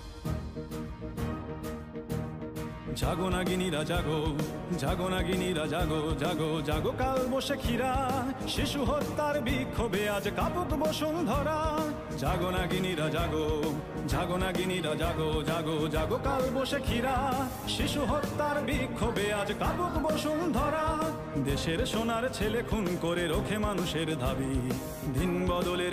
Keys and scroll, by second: 0.4-2.1 typing, 3.9 ctrl+KP_Subtract, 4.8 space, 5.7 ctrl+KP_Subtract, 6.2 space, 6.9 space, 9.2 space, 12.1 ctrl+a, 12.8-20.5 typing, 13.8 ctrl+a, 22.4 Down.